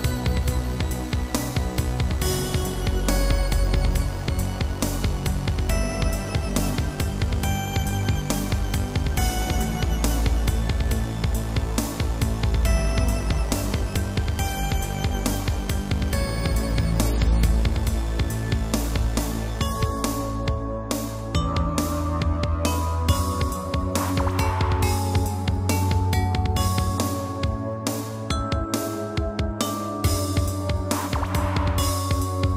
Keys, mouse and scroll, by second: 0.5 click, 0.9 click, 2.4 click, 9.3 scroll up 2, 10.1 click, 10.2 click, 11.3 shift+click, 11.4 shift+click, 11.8 middle click, 13.5 7, 14.3 r, 15.5 click, 15.9 g, 16.4 click, 16.9 middle click, 18.2 shift+Left, 18.6 shift+space, 19.8 Escape, 20.0 middle click, 20.3 shift+space, 21.6 Escape, 22.3 middle click, 23.4 click, 26.9 click, 27.1 double click, 27.6 typing, 28.2 double click, 29.8 b, 30.0 click, 31.2 click.